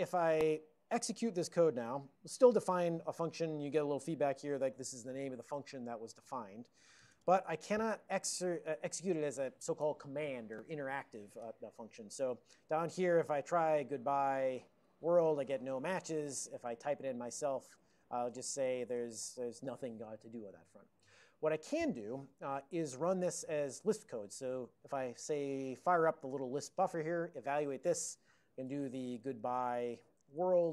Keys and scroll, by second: 13.5-18.5 typing, 15.1 Tab, 15.2 Tab, 16.0 Tab, 19.0 Return, 19.2 Return, 19.4 Return, 21.8 ctrl+g, 26.4 alt+:, 28.7-30.7 typing.